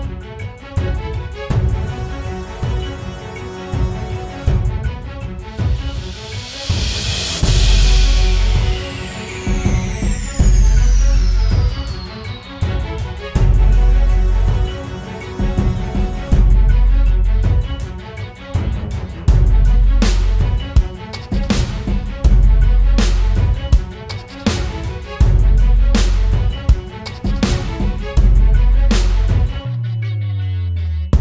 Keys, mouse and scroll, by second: 3.0 alt+shift+click, 4.4 Return, 5.9 Down, 6.7 Left, 6.9 Left, 7.7 Up, 8.4 ctrl+t, 9.1 alt+shift+click, 11.9 Return, 11.9 alt+shift+click, 12.8 Down, 13.8 Right, 15.1 Left, 15.3 Up, 19.4 double click.